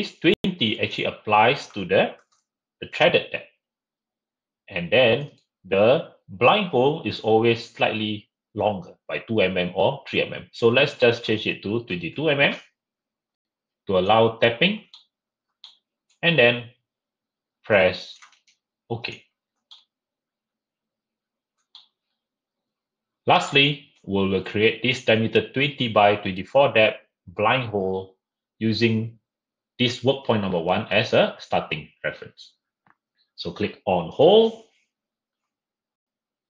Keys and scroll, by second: 2.1 typing, 11.9 typing, 15.4 typing.